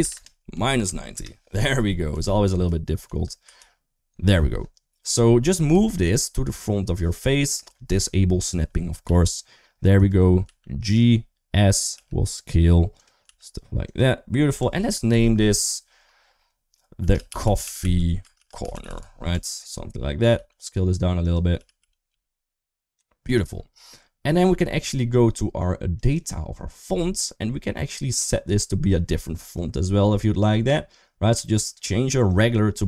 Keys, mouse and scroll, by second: 1.9 KP_1, 2.2 KP_3, 2.9 KP_1, 3.4 ctrl+KP_3, 5.0 shift+middle click, 5.5 g, 8.2 click, 8.9 g, 10.3 s, 11.8 g, 13.1 s, 14.4 Tab, 14.9 ctrl+a, 16.8-19.1 typing, 19.1 Tab, 20.2 s, 21.4 g, 25.9 click, 29.2 click, 32.1 click.